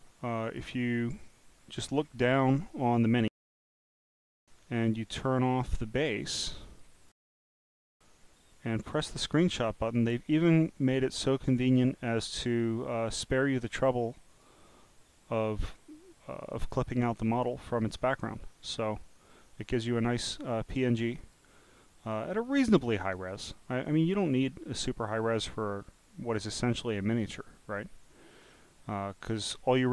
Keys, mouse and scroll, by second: 0.4 click, 1.3 click, 2.0 scroll up 1, 3.5 click, 5.1 click, 6.7 click, 8.9 click, 14.3 click, 18.1 click, 18.9 click, 21.2 click, 22.0 click, 22.6-23.4 scroll down 16, 26.3 click, 28.4 click.